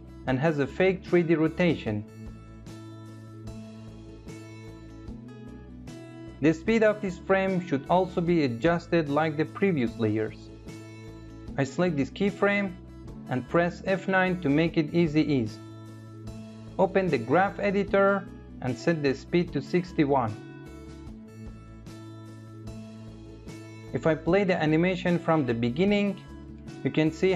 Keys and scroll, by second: 13.5 F9.